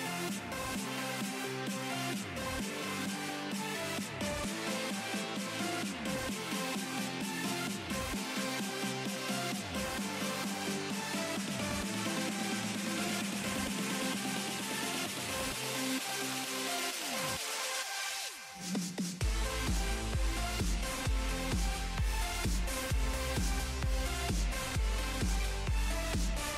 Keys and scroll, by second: 9.1 [.